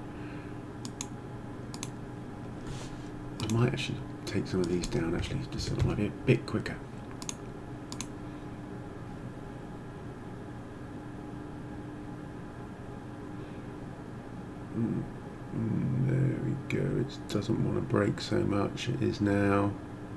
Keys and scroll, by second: 5.2 6, 5.6 4, 5.8 Return.